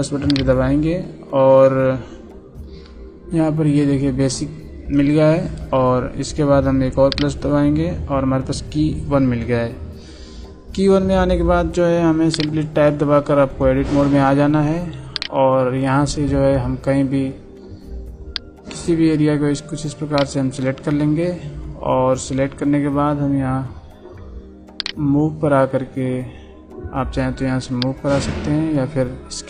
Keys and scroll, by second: 13.3 Tab.